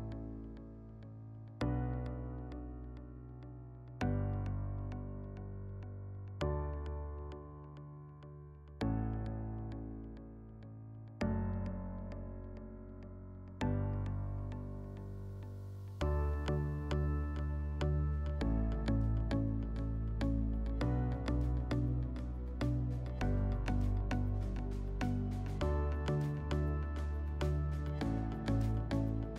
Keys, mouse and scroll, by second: 1.4 alt+middle click, 8.4 click, 9.7 click, 10.5 click, 11.0 click, 11.5 click, 13.2 middle click, 13.6 scroll, 19.4 click, 20.5 click, 21.4 click, 27.5 alt+middle click.